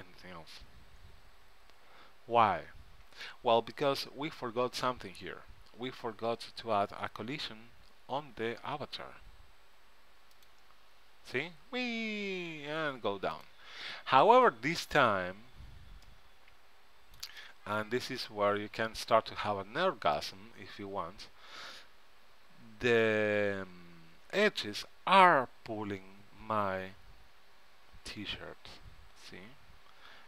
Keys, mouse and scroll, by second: 10.5-12.2 drag, 13.5-16.7 drag, 16.2 middle click, 16.2 right click, 20.3-22.0 right drag.